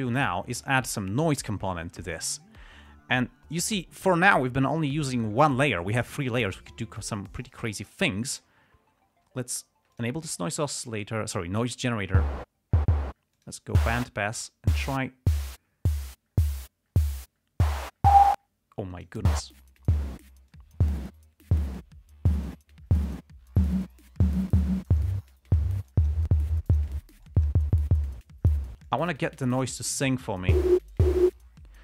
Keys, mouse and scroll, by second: 8.0 click, 10.3 click, 13.7 click, 14.7-19.6 drag, 19.9-20.5 drag, 20.8 click, 25.1-25.5 drag, 26.2 click, 26.9 click, 27.6 click, 29.2-29.8 drag, 30.1-30.6 drag.